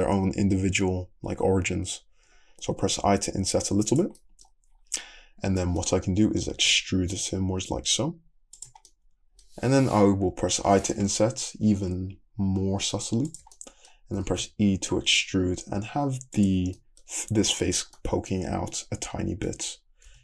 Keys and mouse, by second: 2.1-9.2 shift+middle drag, 6.5 e, 10.5 i, 13.5-20.1 middle drag, 14.2 e, 17.2 Tab, 20.1 Tab, 20.1 click.